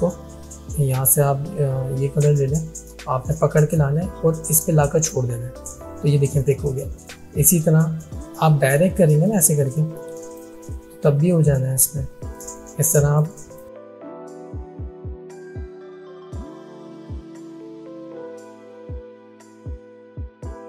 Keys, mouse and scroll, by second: 2.3-5.8 drag, 9.3-10.6 drag, 15.6-17.1 drag, 20.2-20.6 drag.